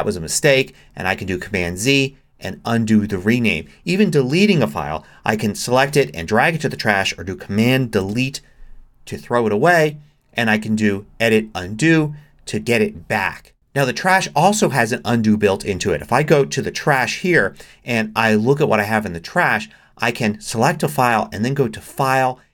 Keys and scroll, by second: 8.0 super+BackSpace.